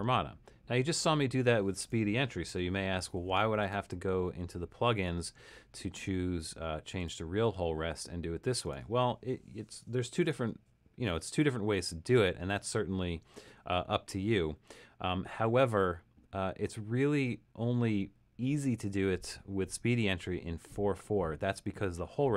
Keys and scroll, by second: 1.3 Escape, 2.5 BackSpace, 10.1 f, 12.5 Escape.